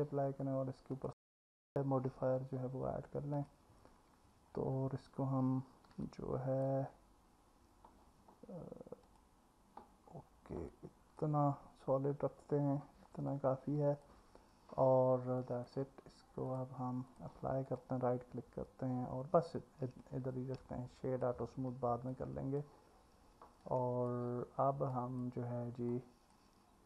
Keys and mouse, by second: 0.9-3.5 drag, 0.9-3.5 right drag, 6.1 alt+middle click, 9.1 click, 10.7 alt+middle click, 13.3 alt+middle click, 15.4 click, 15.4 right click, 16.6-17.2 drag, 17.7-19.0 right drag, 19.6 click, 20.6-21.2 alt+middle drag, 22.1 click, 23.6-24.1 alt+middle drag, 24.9 click, 25.9 alt+middle click.